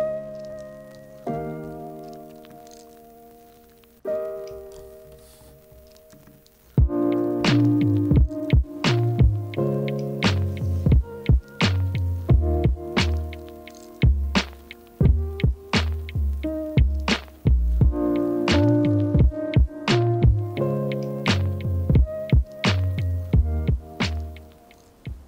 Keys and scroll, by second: 5.0 super+p.